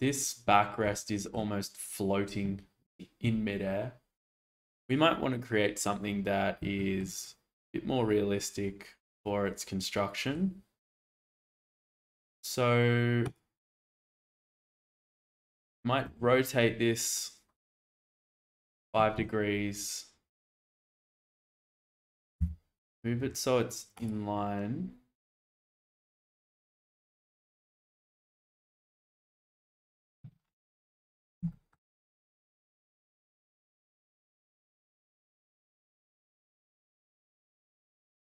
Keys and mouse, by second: 0.9 shift+middle click, 6.8 shift+middle drag, 7.2-10.3 middle drag, 14.4 shift+middle drag, 15.0 alt+z, 16.0 r, 20.5 g, 20.9 x, 21.3 z, 22.4 y, 25.2 g, 25.3 z, 30.8-31.1 shift+middle drag, 31.5 shift+middle drag, 33.0 shift+middle drag, 33.5-34.0 middle drag, 34.4 alt+z, 35.3 middle click, 35.8-38.2 middle drag.